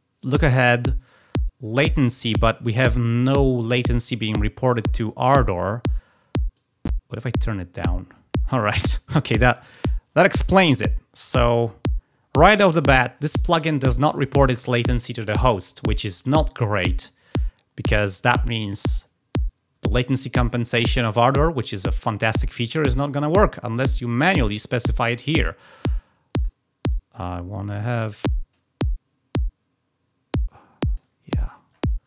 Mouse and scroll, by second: 6.4-7.7 drag, 11.3 click, 24.0 click, 24.9 click, 25.6 click, 26.3 click, 26.8-30.9 drag, 31.1 scroll down 1.